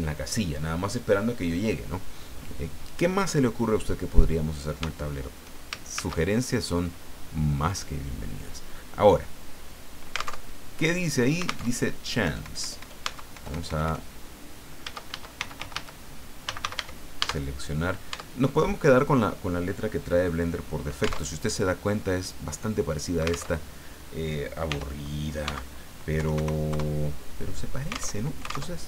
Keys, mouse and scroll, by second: 5.9 shift+a, 7.7 click, 10.4 alt+Tab, 11.6 alt+Tab, 12.2 BackSpace, 13.0 Tab, 13.3 BackSpace, 15.1 shift+Caps_Lock, 15.4-16.7 typing, 17.2 Caps_Lock, 18.1 Tab, 21.2 alt+Tab, 23.5 alt+Tab, 24.7 r, 25.4 x, 26.2 KP_9, 26.4 KP_0, 26.7 KP_Enter, 28.1 alt+Tab.